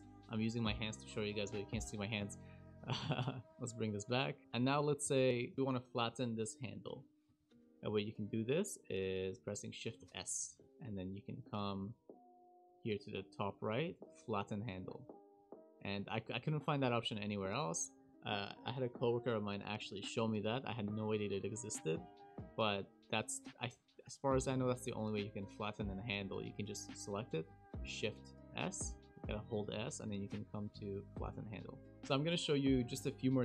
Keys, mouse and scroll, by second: 3.5 click, 3.5 scroll down 1, 3.5 s, 4.4 click, 4.7 shift+middle click, 5.1 click, 5.4 click, 5.5 click, 5.5 scroll down 3, 5.5 KP_Decimal, 5.6 click, 6.1 click, 10.0 shift+s, 15.8 click, 16.9 click, 26.0 click, 28.5 shift+s, 29.0 shift+s, 31.9 Delete, 31.9 Down, 31.9 click.